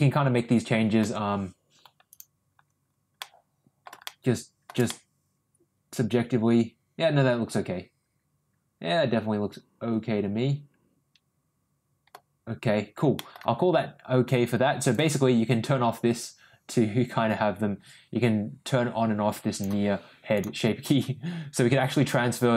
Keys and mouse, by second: 1.0 Tab, 3.3 middle click, 4.1 middle click, 5.0-12.1 middle drag, 13.2 middle drag, 14.8-19.6 drag.